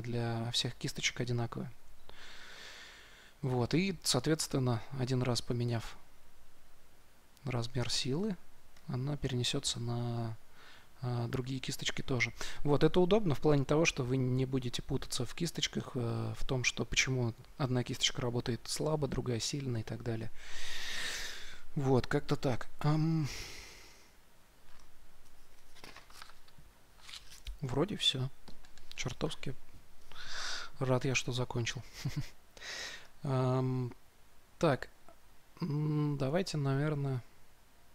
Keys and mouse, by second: 5.4 s, 7.7 shift+f, 32.1-37.9 drag.